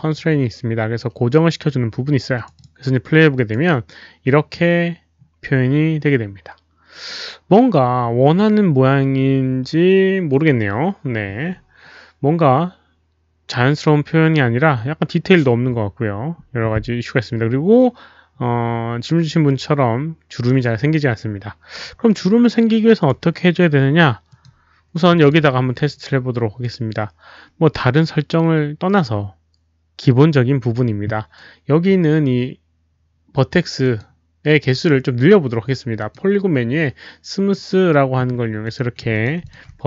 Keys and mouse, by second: 2.3 click, 2.5 click, 3.3 click, 10.5 click, 22.0 click, 22.9 click, 24.2 click, 25.1 alt+click, 32.9 alt+click, 33.8 click, 35.9 click, 37.5 click, 38.6 click, 39.1 alt+click, 39.4 alt+click.